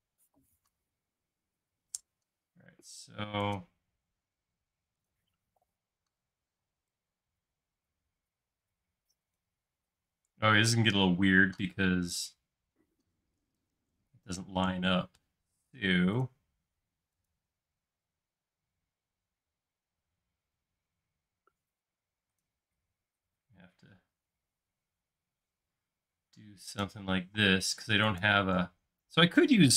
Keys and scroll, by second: 6.5 p, 10.0 space, 13.8 super+z, 14.8 i, 25.1 space, 27.3 m.